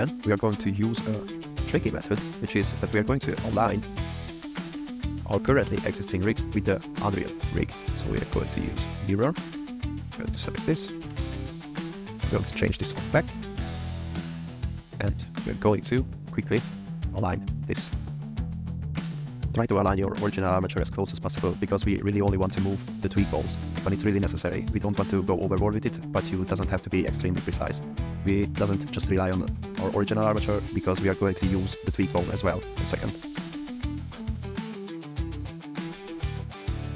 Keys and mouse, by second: 1.3 click, 2.5 click, 3.6-4.1 drag, 4.7 shift+click, 5.3 click, 7.9 click, 10.3 g, 10.7 click, 12.9 click, 13.8 g, 14.4 shift+middle click, 15.3 click, 15.5 shift+middle click, 17.1 g, 18.8-23.7 typing, 19.5 click, 24.5 click, 24.9 r, 25.4 middle click, 25.4 r, 25.9 click, 26.3 r, 27.2 click, 27.4 click, 27.5 g, 27.7 r, 29.0 r, 29.4 r, 29.5 click, 30.4 click, 30.7 g, 32.7 g, 32.9 y, 33.7 y, 34.2 ctrl+z, 35.6 click.